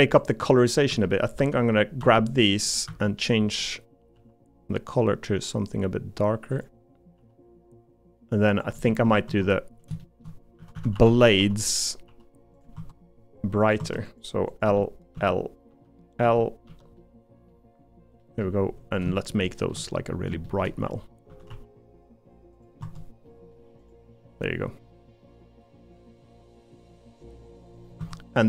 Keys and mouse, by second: 0.7 click, 0.9 l, 2.0 l, 2.9 a, 4.1 g, 8.9 Tab, 10.0 shift+middle click, 10.6-12.1 typing, 12.7 Tab, 13.9 Tab, 14.7 l, 16.2 l, 16.7 l, 17.0 middle click, 18.2 middle click, 19.3 middle click, 20.6 shift+middle click, 20.8 g, 21.3 a, 21.5 g, 22.8 Tab, 23.3 middle click, 24.4 middle click, 25.2-26.9 middle drag, 27.4 middle click, 28.0 Tab, 28.3 middle click.